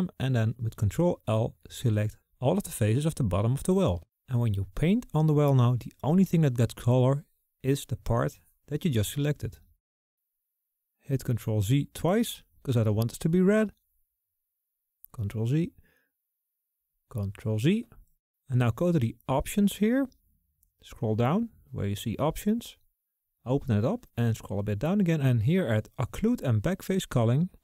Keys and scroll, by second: 12.6 ctrl+z, 14.8 ctrl+z, 16.9 ctrl+z.